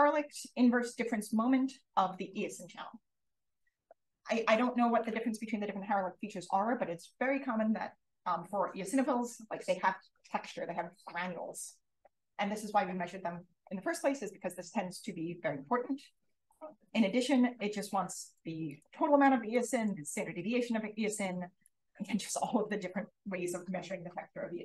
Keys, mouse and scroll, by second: 17.8 click, 18.6 click, 19.4 click, 21.5 click, 22.6 click.